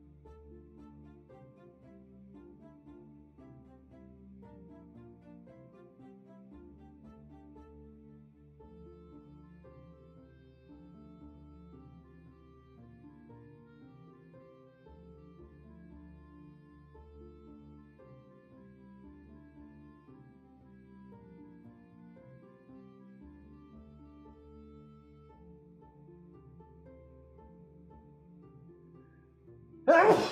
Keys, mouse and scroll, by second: 15.6 ctrl+z, 24.4 ctrl+z.